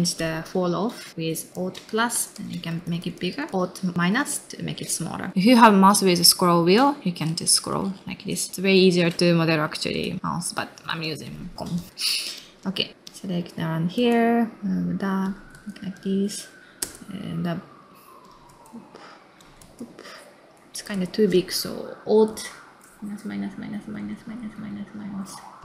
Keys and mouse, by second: 11.9 middle click, 12.3 click, 12.9 middle click, 13.0 click, 13.5 middle click, 13.9 space, 15.2 click, 15.5 space, 18.2 click, 18.5 space, 18.9 middle click, 19.4 click, 19.6 space, 20.0 middle click, 20.3 middle click, 20.7 click, 20.9 space.